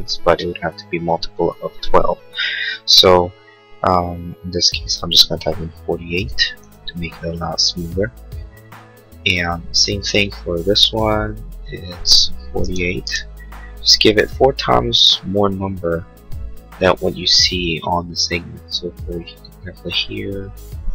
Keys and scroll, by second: 5.4-6.4 typing, 12.3-13.2 typing.